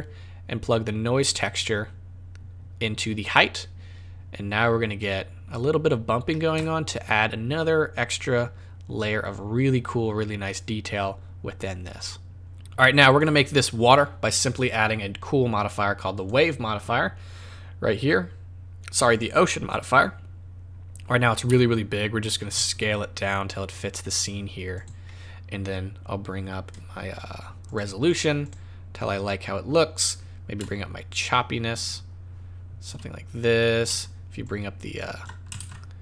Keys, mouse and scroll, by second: 12.4 z, 13.1 click, 16.1 click, 19.9-21.4 scroll down 5, 21.4 s, 25.0 scroll up 4, 27.6 click, 28.0 click, 28.4 click, 30.6 shift+click, 34.4 shift+click, 35.6 ctrl+z.